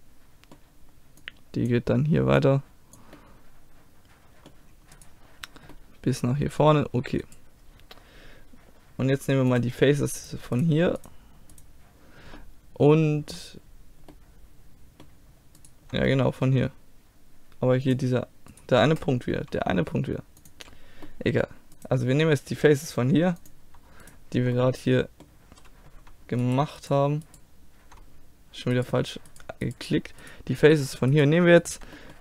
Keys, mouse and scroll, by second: 1.2 click, 3.2-4.4 middle drag, 5.0 right click, 5.8-8.9 middle drag, 10.2-12.4 drag, 10.2-12.4 right drag, 12.4 middle click, 12.8 click, 13.5 middle click, 15.6-17.9 middle drag, 17.9-19.8 drag, 18.5-19.8 right drag, 19.4 g, 19.8 middle click, 20.0 click, 21.1-23.4 middle drag, 21.8-25.1 drag, 23.4-25.1 right drag, 24.6-26.5 middle drag, 32.0-32.2 middle drag.